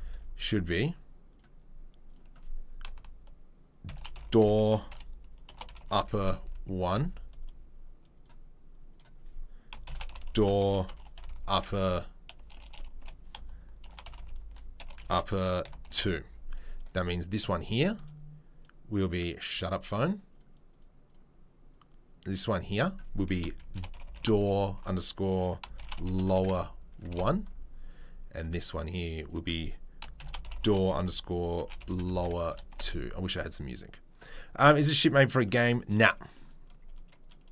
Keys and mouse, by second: 1.3 middle click, 2.1 click, 2.9-4.1 shift+right drag, 4.1 click, 5.8 p, 8.2 middle click, 11.2 p, 12.5 BackSpace, 12.6 BackSpace, 14.1 p, 16.0-17.4 drag, 17.4-20.3 middle drag, 20.3 click, 21.1-21.7 middle drag, 21.7 click, 21.8-22.8 middle drag, 22.8-24.2 drag, 24.2 shift+right click, 24.7-25.7 drag, 25.7 shift+right click, 25.9-28.4 drag, 28.4 middle click, 29.2 click, 30.0 shift+right click, 30.4 click, 30.7-31.7 shift+right drag, 31.7-37.3 drag, 37.3-37.5 middle drag.